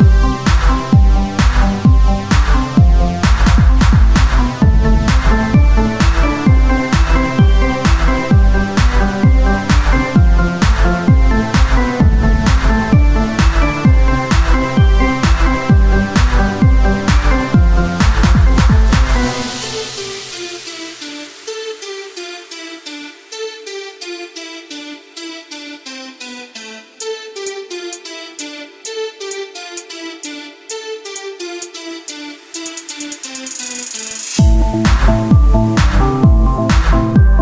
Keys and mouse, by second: 3.7 e, 6.0-8.7 drag, 8.7 z, 12.3 KP_3, 13.4 e, 16.0-17.7 drag, 18.2 e, 20.1-21.2 drag, 23.9-26.4 typing, 27.6 z, 28.7 e, 30.1 s, 35.7 click, 36.1 z.